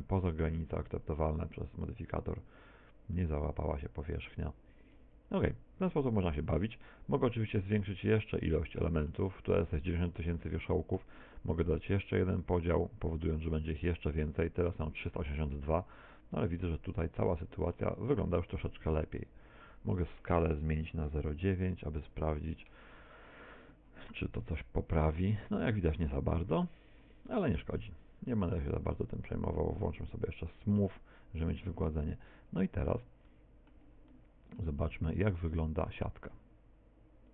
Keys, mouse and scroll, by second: 7.6 middle click, 8.7 middle click, 10.7 middle click, 12.3 click, 16.3 middle click, 18.4 middle click, 19.7 click, 28.2 click, 31.7 middle click, 33.5 middle click, 36.1 click.